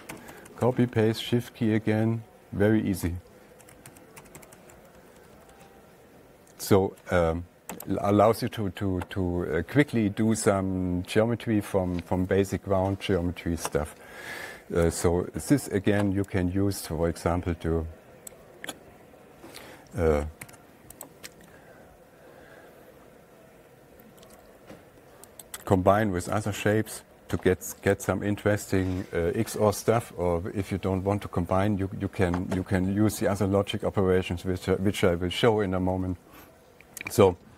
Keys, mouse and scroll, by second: 0.3 ctrl+a, 0.6 ctrl+c, 0.8 ctrl+v, 1.2 Right, 1.3 Right, 1.5 Right, 1.7 Right, 1.9 Right, 3.4 Left, 4.3 ctrl+a, 4.7 ctrl+c, 4.9 ctrl+v, 5.4 Down, 5.7 Down, 5.8 Down, 5.9 Down, 8.3 click, 15.4 click, 18.7 click, 20.9 ctrl+a, 21.5 right click, 25.9 click, 28.5 click, 36.3 click, 36.4 alt+Tab.